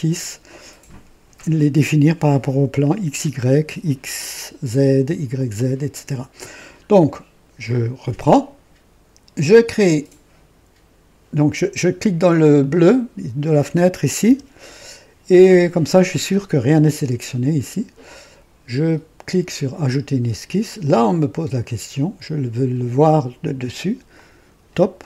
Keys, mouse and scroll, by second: 7.6 click, 11.5 click, 12.5 click, 14.1 typing, 19.8 click, 24.0 click.